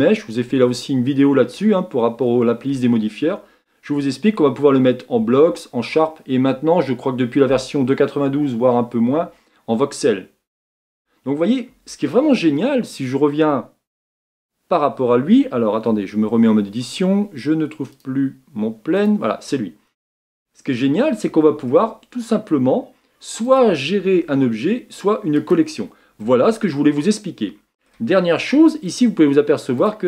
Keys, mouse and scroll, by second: 0.0-13.1 drag, 15.4 click, 16.1 Tab, 19.8 click, 23.4 click, 25.3 click.